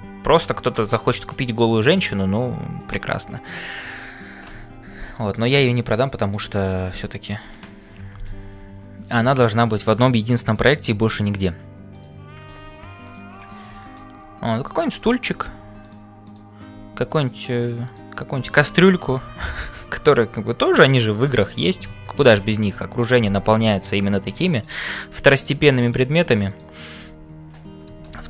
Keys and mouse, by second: 0.0-28.2 typing, 5.1 shift+middle click, 5.9 middle click, 7.7 middle click, 10.4 click, 13.8 shift+middle click, 14.9 click, 16.2 click, 17.8 click, 21.4 middle click, 22.4 ctrl+s, 24.3 middle click, 25.4 middle click, 26.5 click, 28.1 ctrl+l.